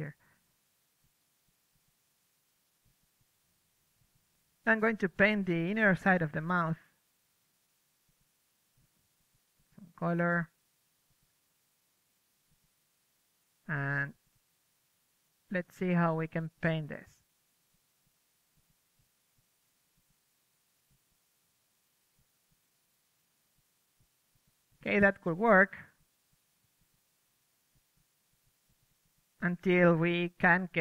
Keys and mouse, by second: 0.3 middle click, 2.4-10.8 drag, 8.8 middle click, 11.3-12.8 drag, 13.0-17.1 drag, 15.0 ctrl+c, 17.1 ctrl+v, 17.9-22.5 drag, 23.8-25.6 drag, 25.0 ctrl+z, 26.0-27.8 drag, 27.7 middle drag, 27.9 click, 28.0 middle drag, 28.1-30.8 drag.